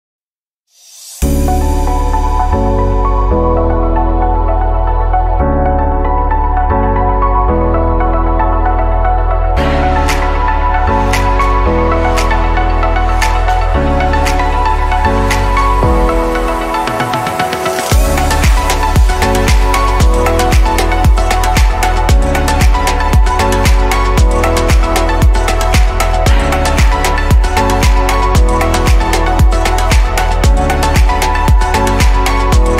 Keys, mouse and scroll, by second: 3.3 shift+a, 4.4-5.6 scroll down 6, 5.6-7.6 scroll down 3, 7.6 click, 11.1 click, 11.6-13.2 scroll up 10, 13.2-14.4 shift+middle drag, 14.4 click, 16.3 click, 19.2-20.2 drag, 24.6-27.2 middle drag, 27.2 click.